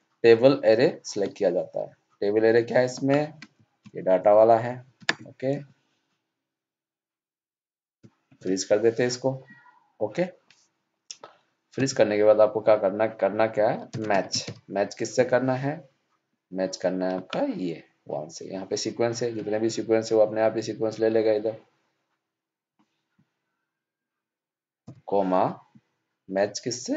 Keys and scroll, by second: 4.9 ctrl+shift+Down.